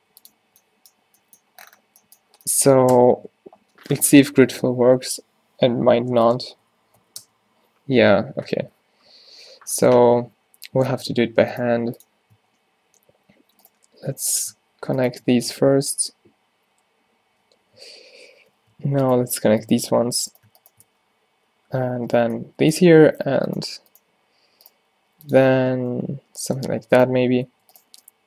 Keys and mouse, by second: 0.5 z, 3.0 space, 6.6 Down, 11.6-18.6 drag, 11.8 g, 15.4 f, 18.6 ctrl+z, 19.1 click, 19.9 f, 20.9 f, 22.1 f, 23.6-24.8 drag, 24.8 g, 25.7 f, 26.0 f, 26.7 Tab, 27.6 a.